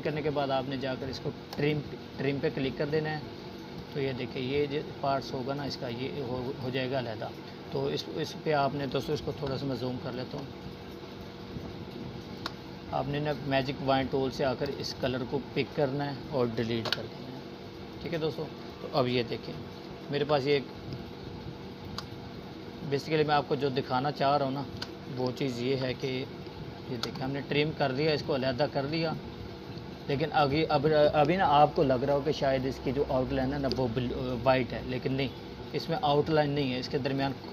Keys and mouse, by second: 4.6 z, 5.0-5.7 drag, 6.7 space, 6.9 click, 7.2-7.9 space, 8.7 click, 12.2 Delete, 13.2 click, 15.9 space, 16.3 click, 16.4-17.2 space, 17.7-18.6 click, 18.5 click, 18.7-22.4 typing, 19.3 click, 21.8 click, 22.5-23.8 drag, 30.5-32.0 drag, 33.2 space, 33.5 click, 33.7-34.1 space.